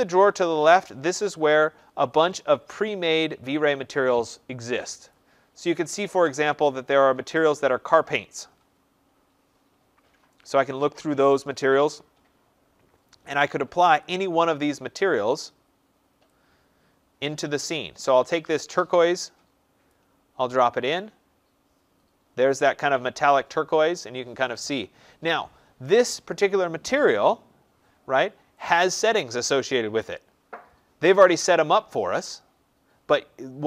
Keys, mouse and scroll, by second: 5.0 click, 6.1 click, 7.3 click, 9.9 scroll, 10.5-11.1 scroll, 11.4 scroll, 12.3 scroll, 19.8 click, 28.5 click.